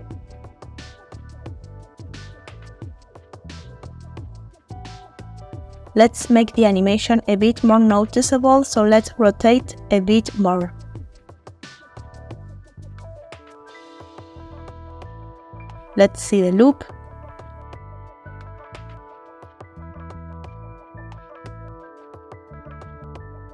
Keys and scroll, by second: 4.6 space, 5.8 r, 14.2-14.9 typing, 16.7 space.